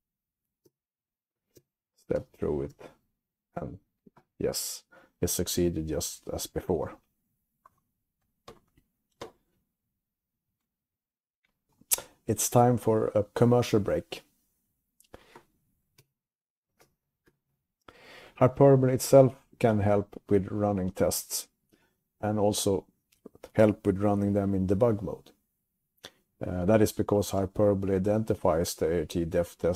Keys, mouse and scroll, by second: 0.3-2.9 typing, 7.0-7.7 typing, 7.9 click, 10.0 scroll down 3, 10.7 scroll up 1.